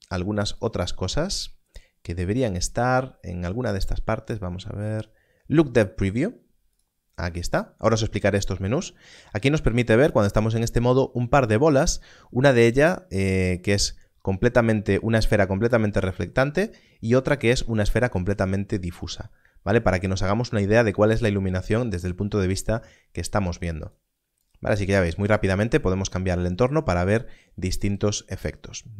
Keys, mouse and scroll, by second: 0.5 click, 23.8 click.